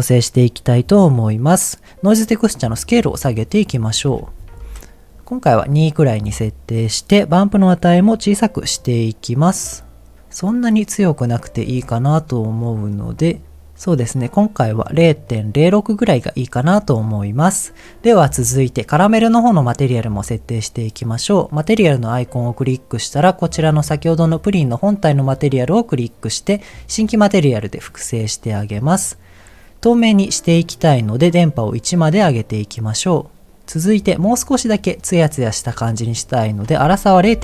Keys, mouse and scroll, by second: 1.3 click, 2.5-3.7 drag, 3.8 click, 8.8-11.0 drag, 11.7-12.4 scroll up 2, 12.4 scroll down 1, 12.6 middle click, 15.2 middle click, 16.7-17.8 scroll down 2, 18.2 click, 22.2-25.5 drag, 27.8 click, 28.6 middle click, 28.9-29.6 scroll down 2, 31.3 click, 36.5-37.4 drag.